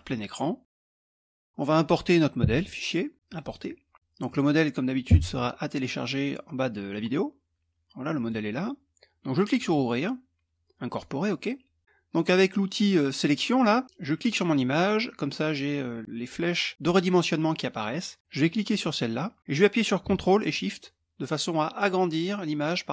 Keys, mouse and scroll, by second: 1.0 middle click, 2.1 click, 3.9 click, 7.7 click, 9.1 click, 10.4 click, 13.5 click, 18.2-22.9 drag.